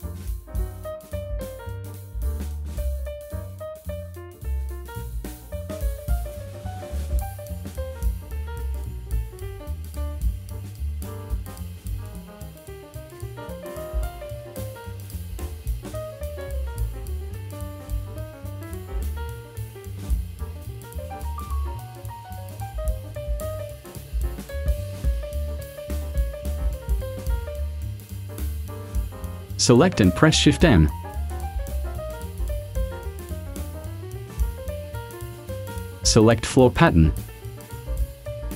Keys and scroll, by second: 27.9 v, 32.0 shift+m.